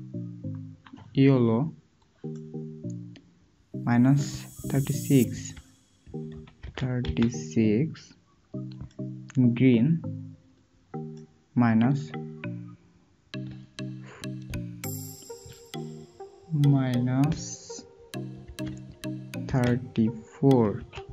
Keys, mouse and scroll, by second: 16.9 typing, 18.4 typing, 19.4 typing.